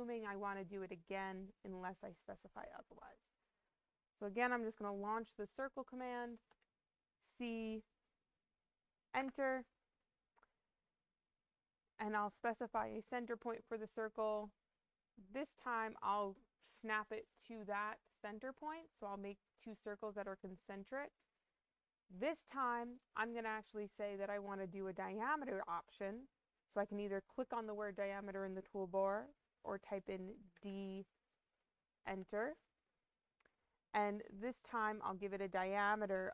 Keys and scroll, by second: 6.4 c, 9.1 Return, 30.4 d, 31.9 Return.